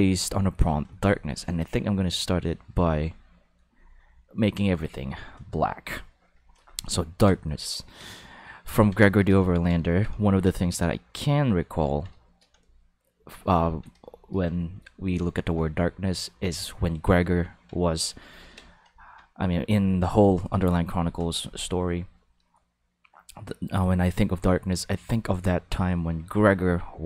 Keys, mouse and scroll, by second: 2.8 drag, 3.6-4.4 drag, 4.8-5.3 drag, 6.3 click, 8.0 ctrl+middle click, 9.1 shift+middle click, 9.5 ctrl+middle click, 9.9 shift+middle click, 10.3 ctrl+middle click, 10.7 shift+middle click, 11.0-12.0 ctrl+middle drag, 12.2 shift+middle click, 12.6-13.8 ctrl+middle drag, 14.0 shift+middle click, 14.5 ctrl+middle click, 15.7-17.6 ctrl+middle drag, 17.9 shift+middle click, 18.3 ctrl+middle click, 19.0 ctrl+middle click.